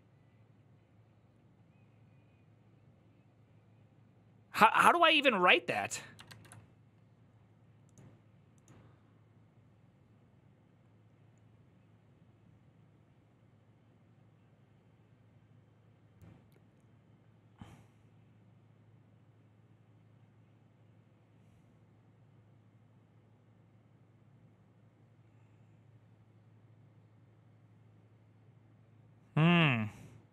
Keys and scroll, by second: 6.1 alt++.